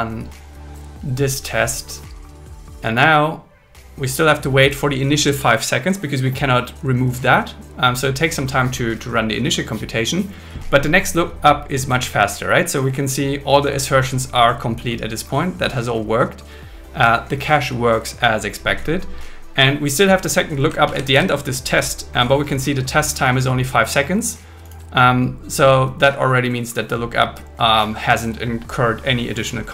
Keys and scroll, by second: 20.9 super+Right, 21.1 shift+super+Left.